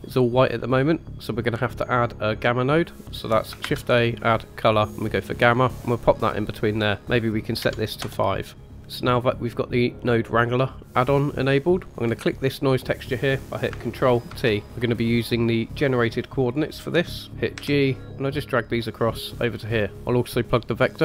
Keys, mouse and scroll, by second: 3.6 shift+a, 7.0 click, 12.0 click, 14.2 ctrl+t, 17.3 g, 17.5 g.